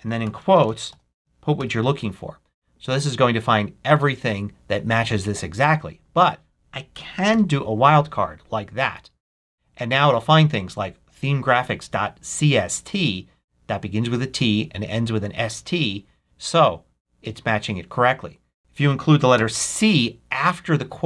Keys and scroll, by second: 0.0-2.0 typing, 6.9 BackSpace, 7.2 shift+8, 18.6 BackSpace, 19.3 c.